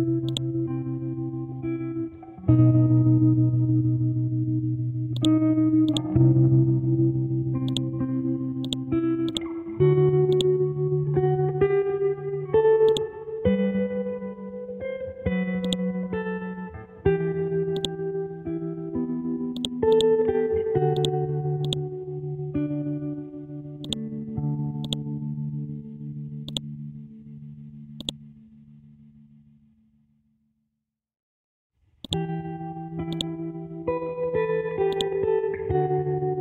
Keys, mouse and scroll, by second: 3.4 scroll down 1, 5.2 click, 6.3-6.9 scroll down 1, 6.9 scroll up 1, 7.7-32.0 drag, 32.0 click.